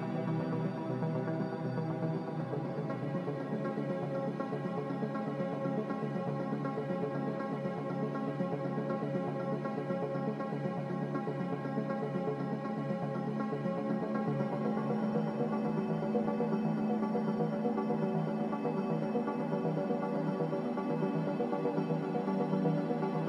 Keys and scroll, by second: 2.4-3.4 typing, 7.0 b, 8.9 a, 22.4 ctrl+c.